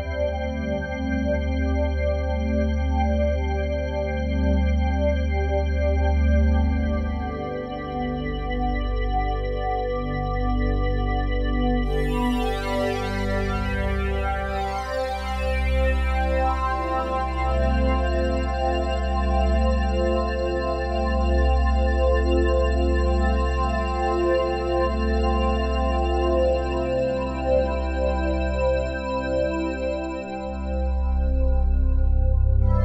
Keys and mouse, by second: 2.1 i, 3.0-6.7 drag, 9.1 i, 9.8 click, 11.8-12.3 typing, 14.5 click, 15.1 typing, 15.6 click, 16.7-17.8 drag, 17.9 click, 18.6 typing, 19.3 click, 20.3 ctrl+s, 22.0 click, 22.4 space, 24.2-24.9 typing, 25.9-27.5 shift+drag, 27.3-28.0 typing, 28.3-30.3 drag, 32.5-32.8 typing.